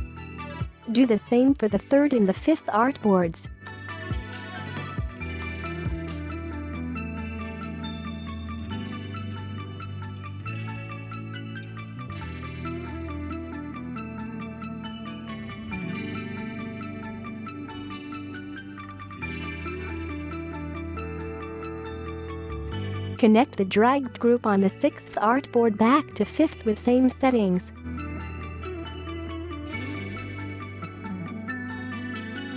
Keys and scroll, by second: 3.4-4.5 space, 5.3-6.0 space, 17.4-18.3 space.